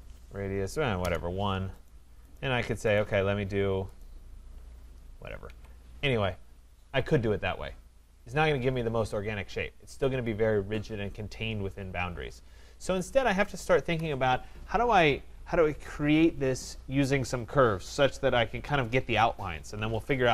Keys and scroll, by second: 5.4 Escape, 13.8 Delete.